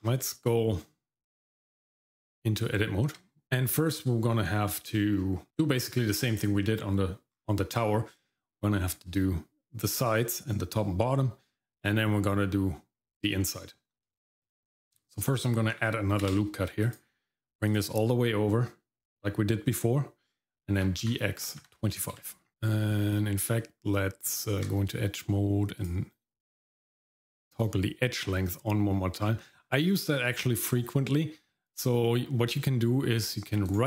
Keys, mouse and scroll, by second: 0.0-0.5 scroll down 1, 0.5 Tab, 3.4 shift+middle click, 5.1-5.5 scroll up 1, 5.5 middle click, 5.5 scroll down 1, 7.3 scroll up 1, 8.4 middle click, 8.9-10.4 scroll down 1, 11.5-11.9 scroll up 1, 13.5-14.0 scroll up 2, 14.1 shift+middle click, 14.7 scroll down 1, 15.0 shift+middle click, 16.2 ctrl+r, 20.9 g, 22.5 shift+middle click, 22.5-23.4 scroll up 1, 24.3 Tab, 25.8-33.8 drag.